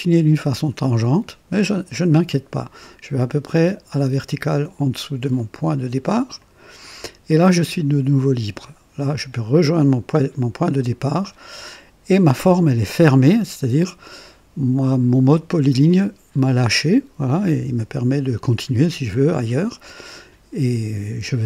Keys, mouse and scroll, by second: 6.4 click, 10.9 click.